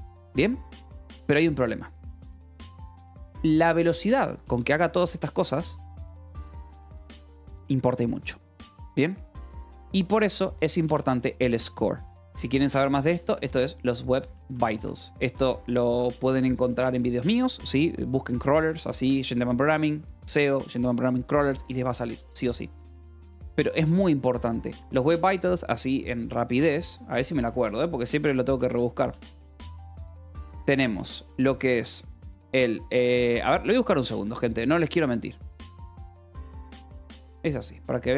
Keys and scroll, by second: 3.4-4.9 typing, 8.7 Escape, 9.2 k, 11.0-15.0 typing, 17.2 ctrl+s, 23.2 Escape, 23.4 k, 24.1 j, 26.8 o, 27.5 Return, 28.5-32.2 typing, 31.7 Return, 35.5-37.4 typing.